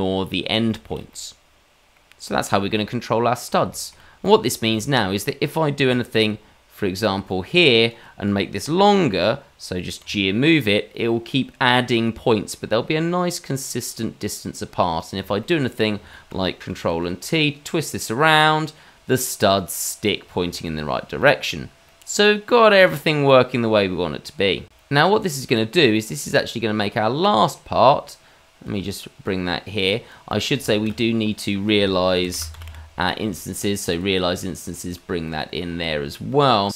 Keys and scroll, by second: 10.0 g, 16.8 ctrl+t, 20.4 ctrl+z.